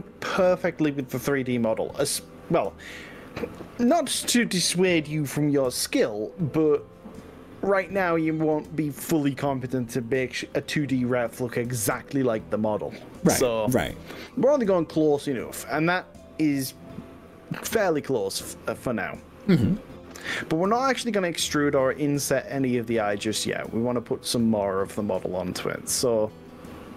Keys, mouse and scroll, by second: 0.9-2.5 shift+middle drag, 3.1 click, 5.1 click.